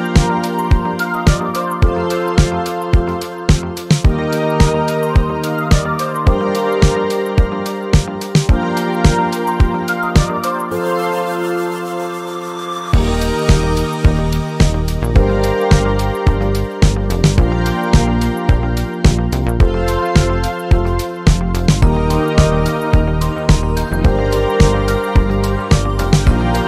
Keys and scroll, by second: 14.3 Return.